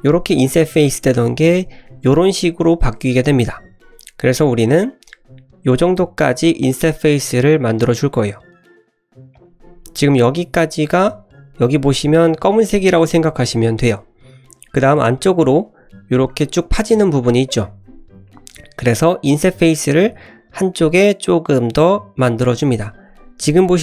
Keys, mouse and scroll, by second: 15.1 scroll up 2, 15.4 middle click, 15.7-16.0 scroll up 2.